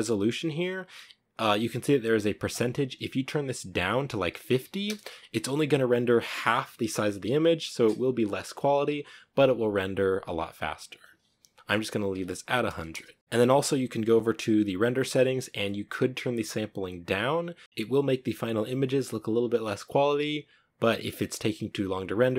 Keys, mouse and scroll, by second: 4.7-12.8 drag, 12.8 0.